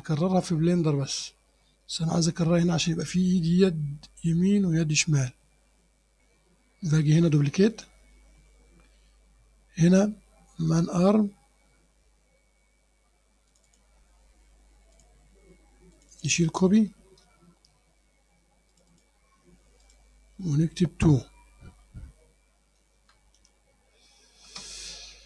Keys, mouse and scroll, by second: 0.3 click, 7.8 click, 13.5 click, 15.0 click, 16.0 click, 17.3 BackSpace, 18.8 click, 19.2 BackSpace, 19.9 click, 23.0 space, 23.4 2, 24.5 Return.